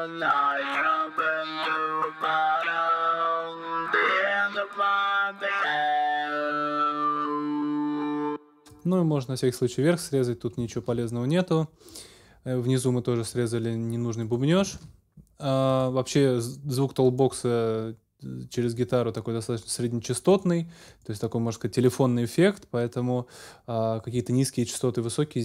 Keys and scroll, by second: 8.0 space, 10.7 super+s, 14.7 super+s.